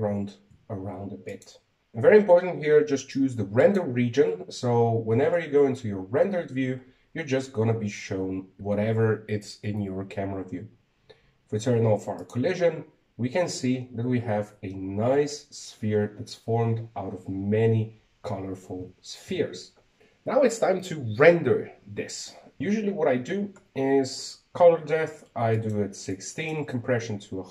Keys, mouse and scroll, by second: 1.3 g, 5.4 click, 7.1 shift+z, 14.1 click, 15.7 scroll up 1, 16.2-19.1 scroll up 1, 20.0 z, 20.2 z, 20.6 z, 27.4 click.